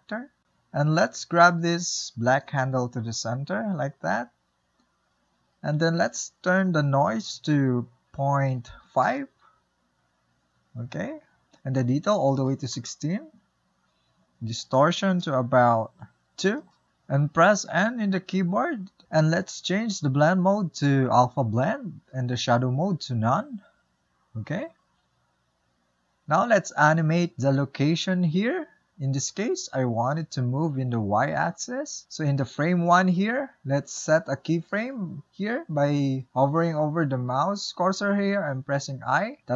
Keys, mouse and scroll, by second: 0.4 click, 1.6-9.6 drag, 13.8-20.1 drag, 20.1 n, 22.5-25.4 drag, 25.4 n, 30.0-39.5 drag.